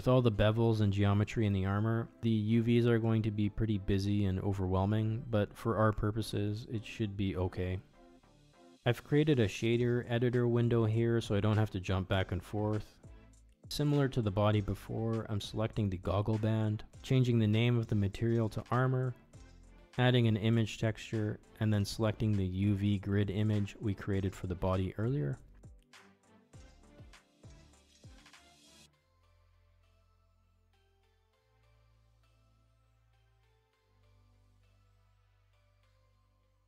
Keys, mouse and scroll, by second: 10.2-15.2 drag, 13.5 o, 14.3 BackSpace, 15.8 click, 16.6 shift+a, 21.1-22.8 drag, 24.8 middle click, 25.4 middle click, 26.8 middle click, 27.7-34.5 drag.